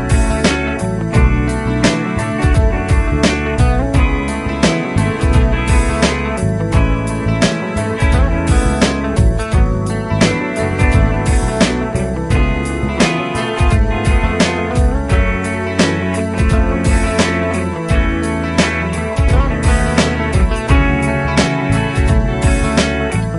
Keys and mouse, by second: 0.6 ctrl+Up, 1.3 ctrl+Up, 6.2 F2, 7.5 F2, 9.0 F2, 12.9 F2, 16.0 ctrl+click, 21.2 double click.